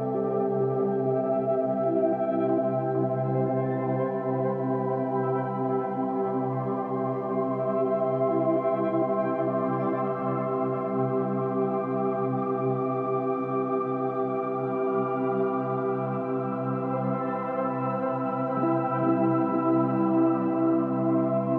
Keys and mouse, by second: 0.0-1.0 drag, 1.1-5.1 drag, 5.8-6.4 drag, 6.4 Up, 7.1 Up, 9.6 Up, 11.5 Up, 12.2 Up, 12.6 Up, 13.0 Up, 13.2 Down, 13.4 Down, 13.5 Down, 13.7 Down, 13.9 Down, 14.0 Down, 14.2 Down, 14.3 Down, 14.9 Up, 15.9 Down, 18.7-21.5 drag.